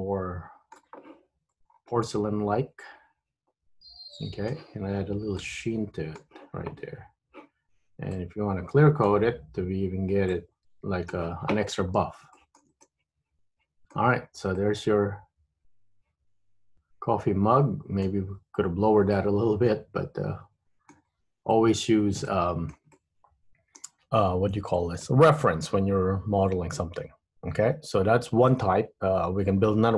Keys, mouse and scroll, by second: 1.6 scroll up 1, 1.8-2.2 scroll down 2, 2.2 middle click, 5.5 click, 8.3 click, 10.5 click, 11.8 scroll up 1, 12.0 scroll down 1, 12.5 shift+middle click, 13.0 middle click, 14.3-14.8 scroll down 3, 14.7 middle click, 19.3 middle click, 21.3-22.1 scroll up 2, 22.4 shift+middle click, 23.1 middle click, 25.1 middle click.